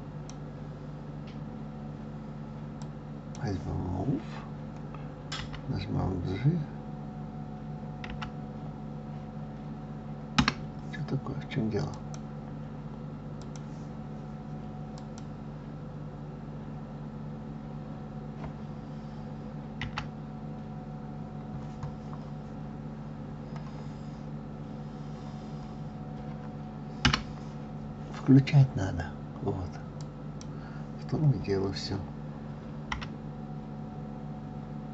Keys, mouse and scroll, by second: 2.7-5.3 drag, 5.3 g, 11.9 click, 13.3 click, 14.9 click, 16.2-16.7 scroll up 2, 16.7-17.2 scroll down 2, 17.2-17.9 scroll up 2, 17.9-19.8 scroll down 2, 19.8 g, 30.0 click, 32.9 g.